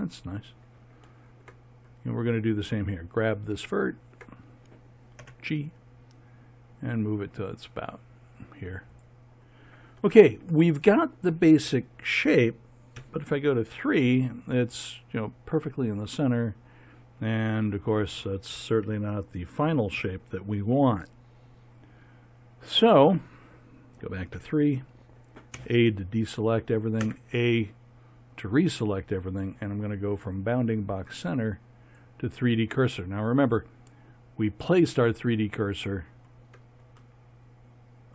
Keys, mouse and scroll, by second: 2.8-5.2 drag, 5.2 g, 12.9 KP_3, 20.0 KP_1, 24.3 KP_3, 25.5 a, 27.0 a, 31.8 click, 37.0 click, 37.2 middle click, 37.4-38.1 drag.